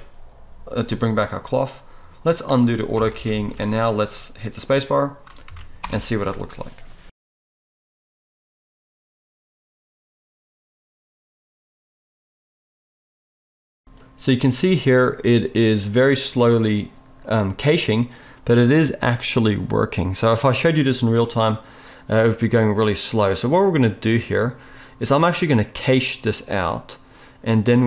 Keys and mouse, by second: 2.3-27.8 middle drag, 3.0 alt+a, 3.4 ctrl+s, 5.5 ctrl+s, 5.8 space.